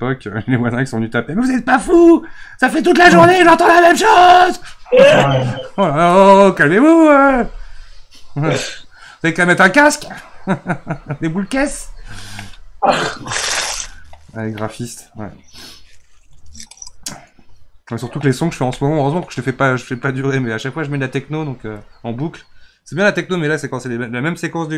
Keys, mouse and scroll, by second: 12.4-13.3 shift+middle drag, 13.3-13.6 scroll up 4, 14.2-14.6 scroll down 1, 14.6-21.9 middle drag.